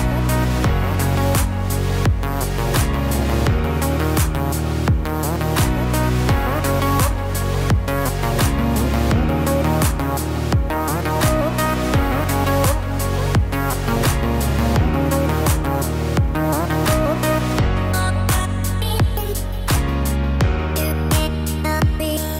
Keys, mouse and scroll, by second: 0.0 middle click, 1.3 click, 2.3 g, 5.5 middle click, 6.7 click, 7.8 g, 10.1 middle click, 11.6 click, 12.5 click, 13.5 g, 15.1 middle click, 16.7 click, 17.5 click, 18.6 g.